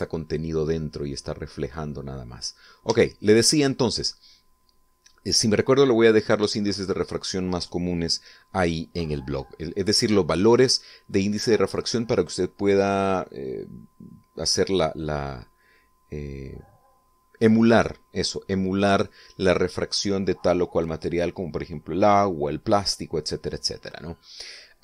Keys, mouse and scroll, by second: 0.0 middle click, 0.8-2.5 middle drag, 3.6 Tab, 3.9 right click.